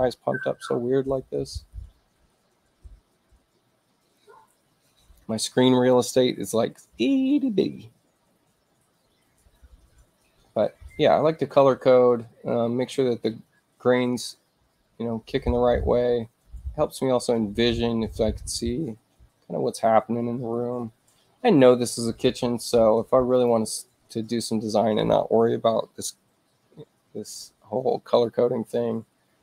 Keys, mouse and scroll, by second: 4.2-5.2 drag, 23.3 click, 24.3 click.